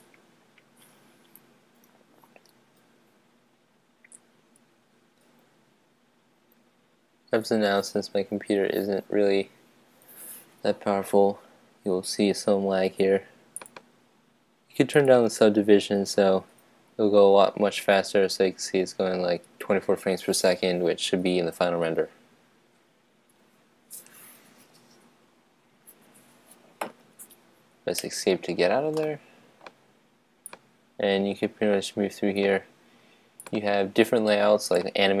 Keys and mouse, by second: 13.8-16.9 drag, 28.1 Escape, 28.9 middle click, 30.6-32.4 drag, 33.4-35.2 drag.